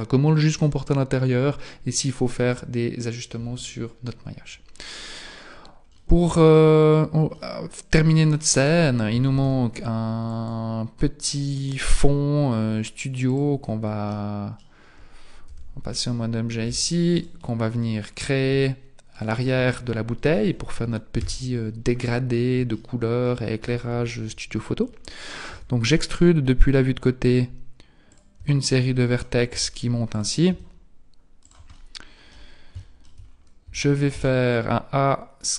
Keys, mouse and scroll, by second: 5.2-6.0 scroll down 3, 6.0 middle click, 6.7-7.3 scroll down 1, 7.3 middle click, 7.3-8.5 scroll down 2, 9.3 shift+a, 11.9 s, 14.1 middle click, 15.5 z, 15.9-16.7 scroll up 3, 16.7 Tab, 17.1 right click, 18.1-18.7 scroll down 1, 18.7-19.0 scroll down 1, 19.1 shift+right click, 21.2 KP_3, 22.3-22.8 scroll down 2, 22.8 shift+middle click, 25.5 e, 28.4 e, 29.5 e, 30.5 e, 31.8 middle click, 32.8 shift+middle click, 33.3-33.9 scroll down 3, 33.7 a, 34.9 a.